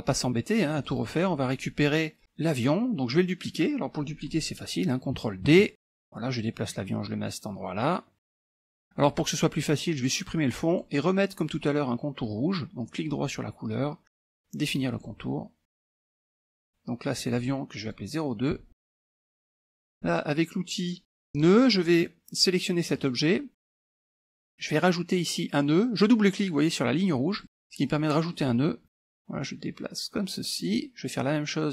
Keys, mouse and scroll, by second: 0.7-1.7 drag, 3.0-3.9 scroll up 1, 5.5 ctrl+d, 5.8-8.8 drag, 10.8 click, 15.0 click, 15.7-16.3 scroll up 1, 17.2-18.7 drag, 19.2 BackSpace, 19.8 KP_Enter, 21.4 click, 23.0 click, 27.3 click, 28.2 middle click, 29.0-30.9 drag.